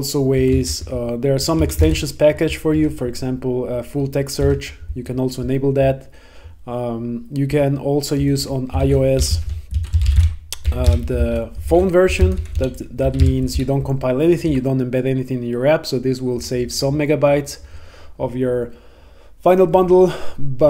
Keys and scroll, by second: 0.5 Return, 4.4 Tab, 8.3 Return, 11.3 Right.